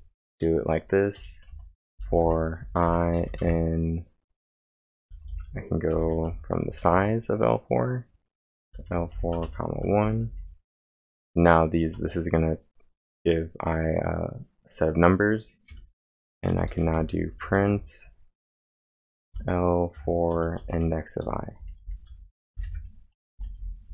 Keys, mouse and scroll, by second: 0.0-3.7 typing, 1.5 Return, 5.0-7.3 typing, 9.4-10.8 typing, 15.5-18.1 typing, 21.3-23.9 typing.